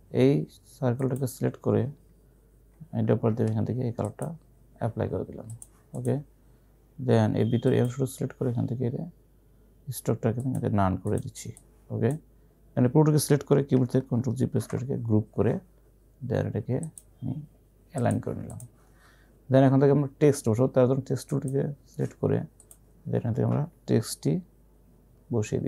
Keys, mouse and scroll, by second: 0.8-1.6 typing, 1.0 click, 1.1 click, 4.1 click, 10.5-14.7 drag, 14.7 ctrl+g, 17.0 click, 21.1-21.8 typing, 21.3 click.